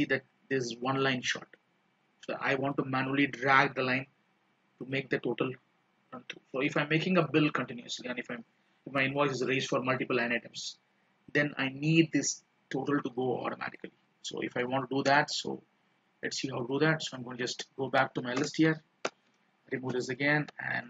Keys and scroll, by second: 17.3 ctrl+Down, 19.2 ctrl+-, 20.6 ctrl+Left.